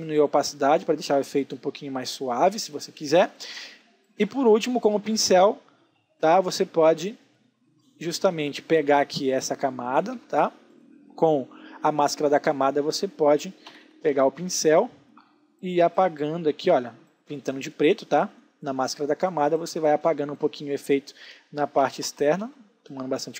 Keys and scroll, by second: 2.6 space, 5.8 b, 8.4 Escape, 13.6 b.